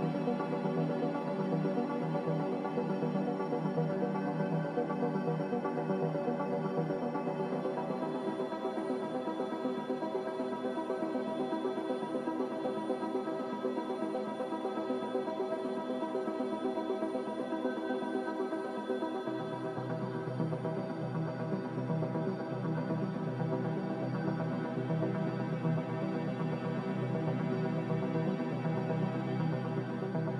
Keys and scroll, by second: 6.9 b, 10.6 Delete, 16.3 n, 22.7 Escape, 25.7 b, 26.8 n.